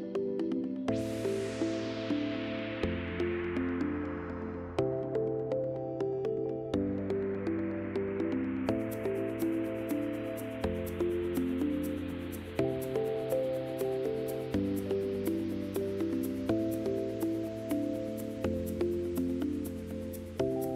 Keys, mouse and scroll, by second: 0.9 click, 5.5 click, 7.4-16.2 right drag, 16.5 click, 17.4-20.7 typing.